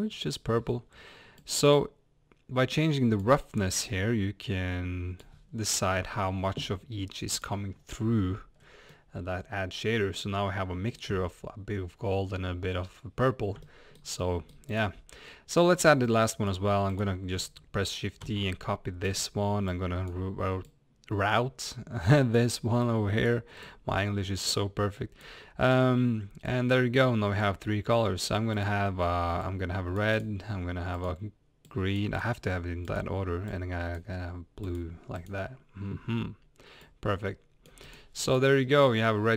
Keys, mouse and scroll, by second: 1.6-8.0 drag, 8.0 scroll up 1, 8.6 scroll down 1, 8.9-16.9 middle drag, 16.9 click, 18.2 shift+d, 19.7 click, 20.6 click, 22.8 click, 26.5 click, 36.8-38.4 drag, 38.6-38.9 scroll down 1, 39.0-39.3 middle drag.